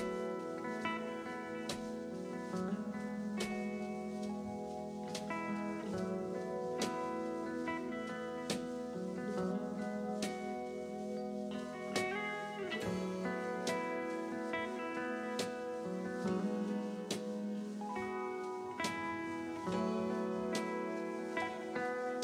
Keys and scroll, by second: 13.1 s, 14.5-17.7 typing, 19.3 ctrl+z, 19.6 2.